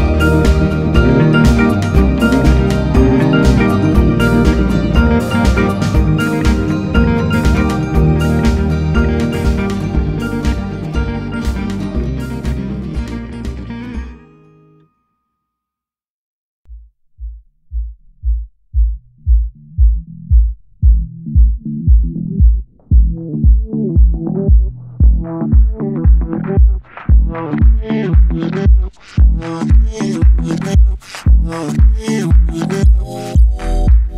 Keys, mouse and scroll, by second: 0.4 click, 1.2 KP_Divide, 3.5 Tab, 4.8-5.9 right drag, 5.9-8.5 drag, 9.1 alt+click, 10.5 click, 12.4-14.1 drag, 14.1 Tab, 15.0-16.1 drag, 16.1 Tab, 16.6 s, 20.7 Tab, 23.0-25.3 drag, 25.3 i, 26.9-28.6 drag, 30.9-32.0 drag, 32.0 space, 32.6 space, 33.5-34.1 drag.